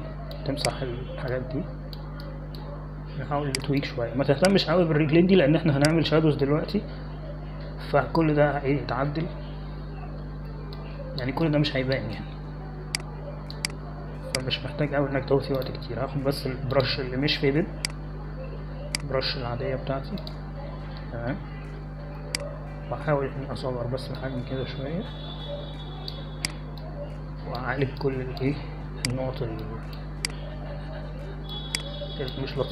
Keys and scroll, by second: 11.1 ctrl+=, 11.3 ctrl+=, 11.5 ctrl+=, 12.5 space, 23.9-25.5 typing.